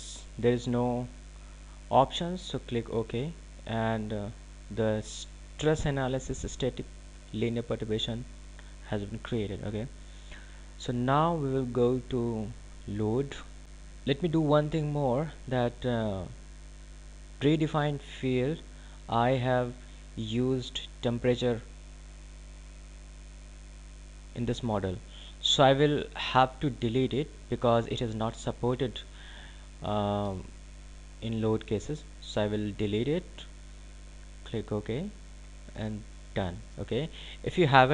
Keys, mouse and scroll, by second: 2.9 click, 10.8 click, 19.2 click, 27.8 click, 34.6 click.